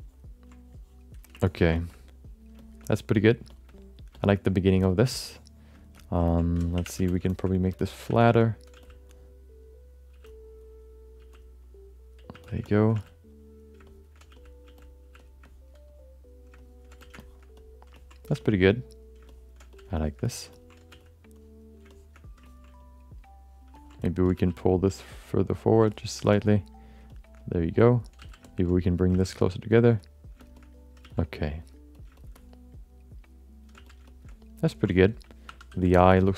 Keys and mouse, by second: 0.6 click, 1.4 ctrl+middle click, 1.7 shift+middle click, 1.9 alt+middle click, 2.6 alt+shift+middle click, 2.8 alt+middle click, 3.5 alt+shift+middle click, 3.7 alt+middle click, 4.1 alt+shift+middle click, 4.8 alt+shift+middle click, 5.7 alt+shift+middle click, 6.0 alt+middle click, 6.3 ctrl+alt+middle click, 6.7 3, 6.9 f, 7.3 alt+shift+middle click, 7.5 alt+middle click, 7.8 ctrl+middle click, 8.0 f, 8.4 alt+middle click, 8.7 f, 9.1 click, 10.2 f, 11.2 f, 11.6 click, 12.3 f, 12.6 alt+shift+middle click, 12.9 f, 13.3 click, 13.9 shift+middle click, 14.3 f, 14.6 f, 15.0 f, 15.4 alt+middle click, 15.9 click, 16.6 alt+middle click, 16.9 f, 17.2 alt+shift+middle click, 17.6 alt+middle click, 17.9 ctrl+alt+middle click, 18.7 click, 19.3 alt+shift+middle click, 19.6 f, 20.0 alt+shift+middle click, 20.3 alt+middle click, 20.5 ctrl+middle click, 20.9 f, 21.3 click, 21.9 middle click, 22.4 ctrl+alt+middle click, 22.8 alt+middle click, 23.7 ctrl+middle click, 24.0 middle click, 24.3 f, 24.8 click, 25.5 click, 25.9 alt+middle click, 26.3 alt+shift+middle click, 26.5 alt+middle click, 27.1 alt+shift+middle click, 27.4 alt+middle click, 28.2 f, 29.1 f, 29.4 click, 29.7 click, 30.0 click, 30.4 alt+shift+middle click, 30.5 alt+middle click, 31.0 f, 31.3 click, 31.6 click, 32.2 shift+middle click, 32.3-33.6 alt+middle drag, 33.7 f, 34.1 alt+shift+middle click, 34.3 alt+middle click, 34.7 ctrl+alt+middle click, 35.5 2, 35.7 f, 36.0 alt+shift+middle click, 36.2 alt+middle click.